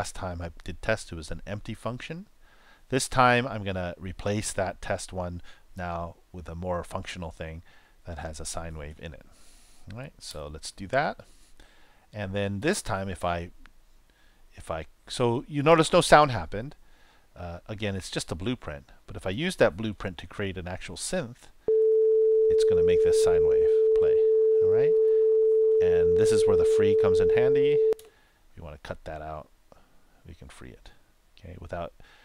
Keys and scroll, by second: 10.2 super+Return, 21.6 super+Return, 27.8 super+Return.